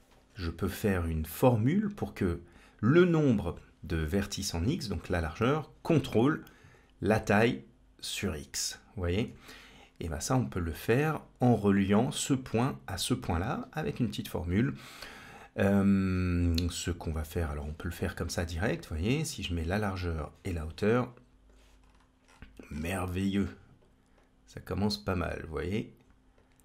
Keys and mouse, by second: 7.0-9.2 drag, 9.6 click, 17.3-19.1 drag, 20.1-21.4 drag, 24.0-25.8 drag, 26.2-26.6 drag.